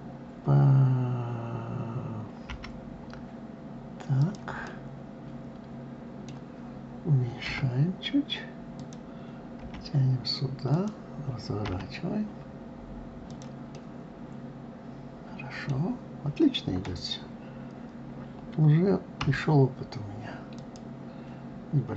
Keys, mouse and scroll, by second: 4.2-7.1 middle drag, 7.1 s, 11.3 r, 13.3-16.3 middle drag.